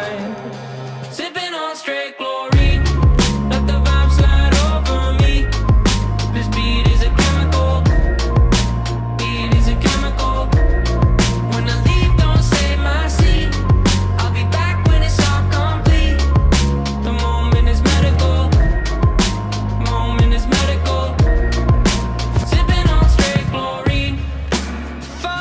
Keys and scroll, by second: 0.2 w, 0.7 space, 2.4 e, 3.7 w, 6.0 e, 8.7-10.3 typing, 13.2 e, 14.7 w, 15.7 e, 16.2 shift+a, 21.7 f, 23.3 `, 24.5 w, 24.8 e.